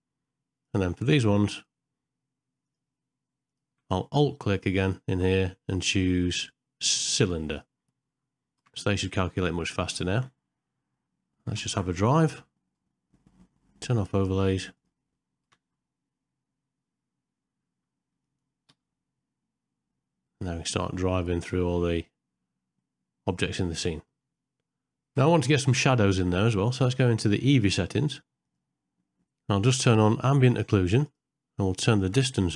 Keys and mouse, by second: 1.5 shift+click, 2.6 shift+click, 3.5 shift+click, 4.9-7.6 alt+drag, 8.7 space, 11.0 shift+Left, 11.7 KP_0, 14.7 click, 15.5 space, 18.2 click, 25.2 space, 28.4 click, 30.5 click, 31.1 click.